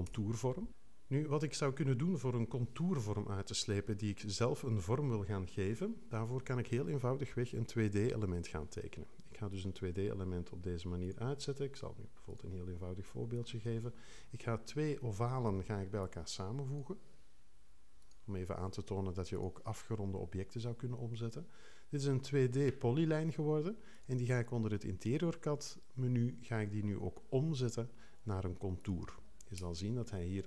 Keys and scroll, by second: 0.1 BackSpace, 3.7 3, 5.7 0, 15.4 x.